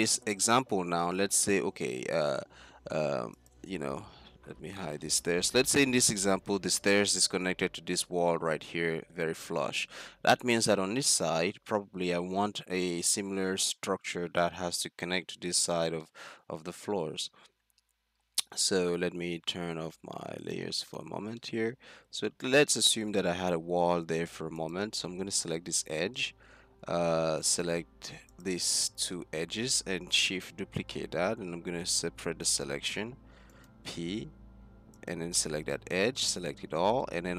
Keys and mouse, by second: 0.0 z, 0.9 z, 3.5-5.5 drag, 4.6 h, 6.2-8.0 middle drag, 10.1-10.5 middle drag, 11.7-13.1 middle drag, 14.9 middle click, 16.1 middle click, 20.5 middle click, 22.2 z, 23.0 z, 24.9 z, 25.1-26.4 drag, 25.7 Tab, 26.4 middle click, 27.4-29.3 drag, 28.7 z, 30.3 shift+d, 31.8 p, 34.3 Tab, 34.4 z, 35.5 Tab, 35.8 z, 36.2 a, 36.5 z.